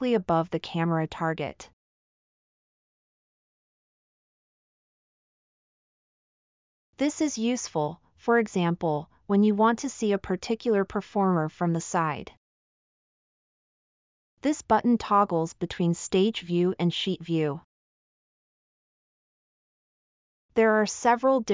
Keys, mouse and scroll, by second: 4.1-5.9 middle drag, 7.7 scroll down 1, 9.2-9.8 middle drag, 11.5-11.9 middle drag, 13.0-13.6 drag, 13.0-13.6 right drag, 13.9-18.3 drag, 13.9-18.3 right drag.